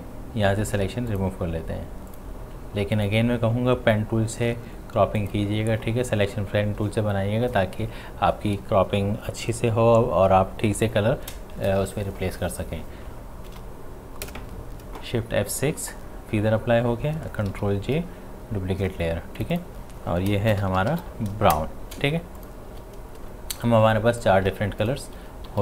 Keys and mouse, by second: 5.2 alt+click, 13.1 alt+click, 13.5 shift+F6, 14.3 Return, 17.2 Return, 17.5 ctrl+j, 19.4 click, 20.3-21.5 typing, 22.1 ctrl+space, 22.4 ctrl+alt+click, 23.3 space, 23.6 click, 23.8 space, 24.8 ctrl+alt+click, 25.5 v.